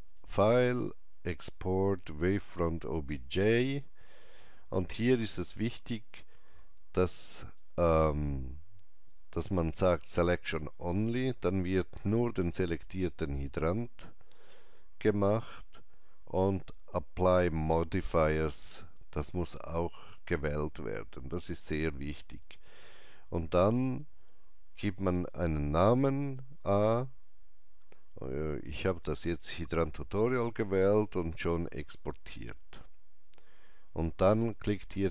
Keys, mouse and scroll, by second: 0.8 click, 1.3 click, 11.3 click.